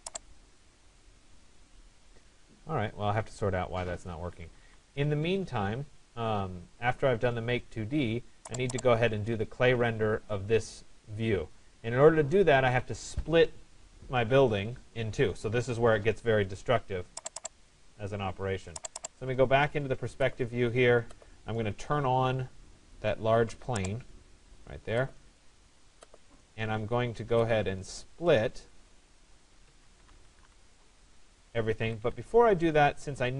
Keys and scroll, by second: 4.1 Escape, 6.8 Escape, 30.7 Return, 31.9 Escape.